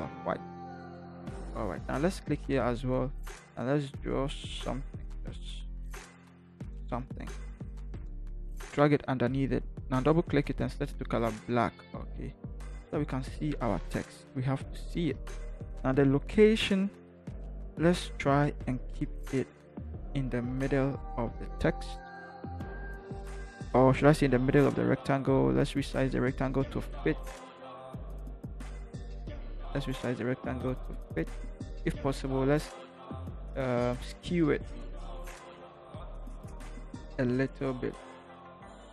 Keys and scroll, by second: 13.7 ctrl+=, 18.8 v, 19.6 Left, 19.7 Left, 19.8 Left, 20.3 Up, 20.5 Up, 20.7 Up, 20.9 Up, 23.2 ctrl+t.